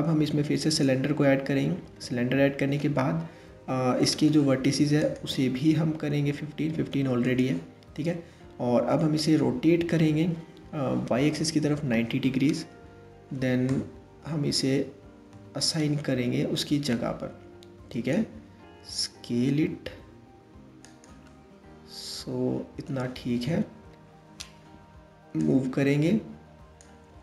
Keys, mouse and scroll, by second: 4.6-9.4 drag, 9.4 r, 14.9 KP_3, 16.2 click, 18.2 s, 20.8 scroll up 1, 20.9-23.0 middle drag, 23.0 KP_1, 25.0 click, 26.7 s.